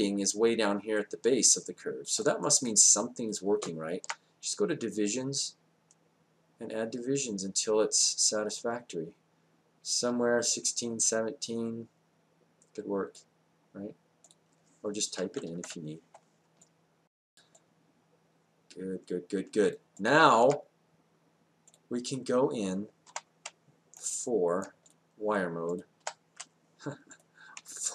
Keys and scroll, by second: 15.0-15.9 typing, 23.1 4, 24.6 4, 26.0 4.